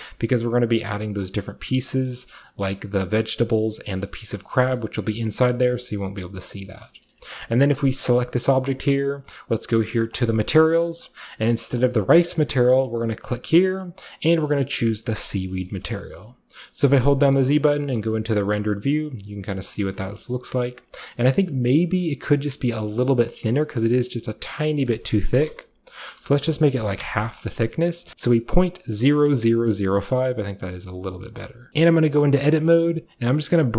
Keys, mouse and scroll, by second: 0.1-1.9 middle drag, 2.1 middle click, 2.4-3.9 scroll down 1, 2.7-3.9 middle drag, 4.0-4.3 scroll up 1, 4.1 middle click, 4.3 scroll down 1, 4.5-5.2 scroll up 2, 4.5 Tab, 4.8-5.4 middle drag, 5.2 scroll down 1, 5.2 scroll up 1, 5.4-5.8 scroll down 1, 5.7 middle click, 5.7 a, 6.9-7.2 middle drag, 6.9-8.0 scroll up 1, 8.0-8.6 shift+scroll up 1, 10.2 click, 11.0 click, 12.9 click, 15.1 click, 15.5-17.4 shift+middle drag, 17.4 z, 17.4 z, 18.0 a, 18.5-19.5 scroll down 2, 18.7-19.5 middle drag, 19.1 typing, 19.9-20.8 scroll up 1, 19.9-22.1 middle drag, 20.8-22.1 scroll up 1, 22.1-22.9 typing, 22.3 click, 23.0-24.6 shift+scroll up 1, 23.0-24.6 shift+middle drag, 24.6 click, 24.7 click, 25.4-26.8 typing, 27.0 Return, 28.1-29.1 middle drag, 28.1-29.1 scroll down 1, 29.3 middle click, 30.9 middle click, 31.5 scroll up 1, 31.7 z, 32.0 Tab, 32.6 g, 33.4 z.